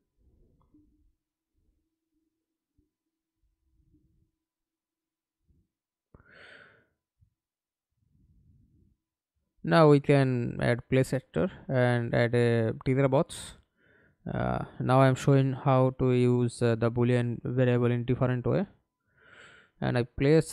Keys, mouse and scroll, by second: 0.4-0.7 scroll up 1, 1.0 right click, 3.2 scroll down 1, 3.9 right click, 6.2 alt+F9, 15.1 f, 15.9 alt+click, 18.4 r, 18.8-19.2 scroll down 3, 19.3 alt+click, 20.2 w.